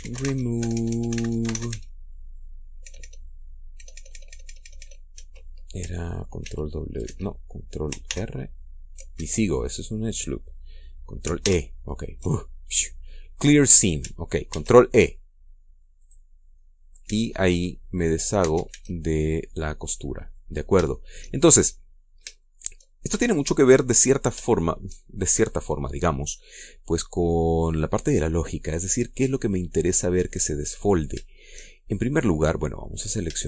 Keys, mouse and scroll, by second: 0.0-2.4 typing, 3.5 BackSpace, 5.8 Escape, 7.1 ctrl+w, 7.7 ctrl+Escape, 8.8 ctrl+r, 9.9 ctrl+Escape, 12.1 ctrl+e, 15.2 ctrl+e, 16.7 click, 17.2 scroll down 1, 17.7 Tab, 18.1-18.5 scroll up 1, 19.1 Tab, 19.4 a, 19.9-21.2 middle drag, 21.6 shift+middle click, 22.6-22.9 scroll up 2, 23.1-23.5 shift+middle drag, 24.6 shift+scroll down 2, 25.3 shift+middle click, 26.3-26.7 scroll down 2, 26.9-31.9 middle drag, 32.7 middle click.